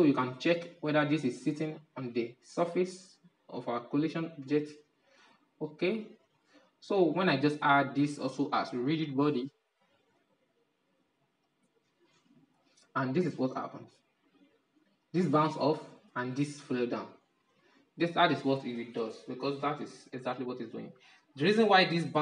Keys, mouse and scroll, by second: 0.8-1.3 scroll up 6, 1.3-3.9 middle drag, 3.9-4.4 scroll down 6, 4.4-9.3 shift+middle drag, 11.3-16.2 drag, 17.0 click, 17.4-20.4 drag.